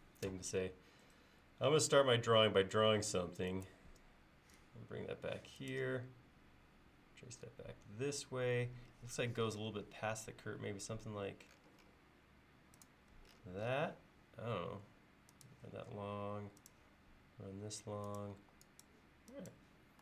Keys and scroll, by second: 15.8 l, 18.4 e.